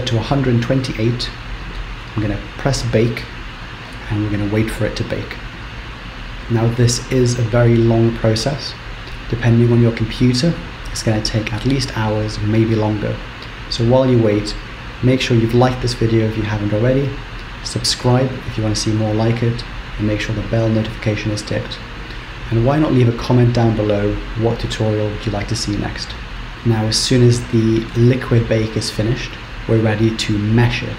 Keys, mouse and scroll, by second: 1.5-3.2 scroll down 6, 3.2 click, 26.3-26.8 scroll down 1, 26.8-28.2 scroll down 2.